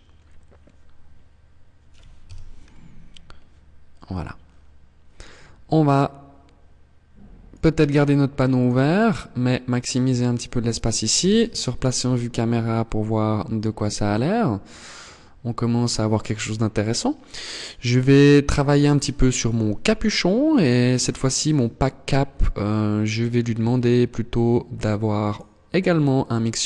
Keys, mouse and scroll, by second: 6.9 click, 8.0-9.0 scroll down 7, 10.1 KP_0, 11.1 scroll down 1, 11.7 scroll down 2, 16.9 right click, 17.6 right click, 19.2 click, 21.5 click, 23.9 click.